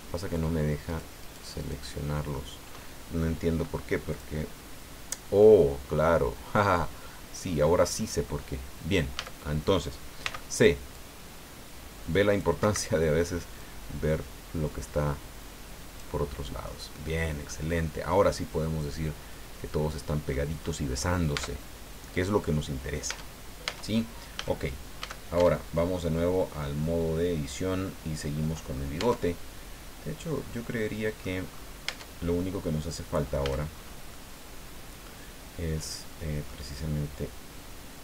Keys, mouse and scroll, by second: 0.8 ctrl+shift+right click, 4.1 click, 4.8-5.2 scroll down 2, 5.4-8.4 drag, 9.1 a, 10.2 c, 10.9-12.6 drag, 12.6 Escape, 13.6-16.2 drag, 16.4 scroll down 1, 16.6-20.5 middle drag, 20.6-20.9 scroll up 1, 21.3 Tab, 21.7 scroll down 1, 22.1 click, 23.1 Tab, 24.3 a, 25.0 a, 25.4 Tab, 25.8-26.5 scroll down 3, 26.6-28.9 drag, 29.0 Tab, 29.8-31.4 drag, 31.5-31.9 scroll up 2, 31.9 Tab, 32.4-33.5 drag, 33.4 a, 33.7-34.0 scroll up 1, 34.1-36.6 drag.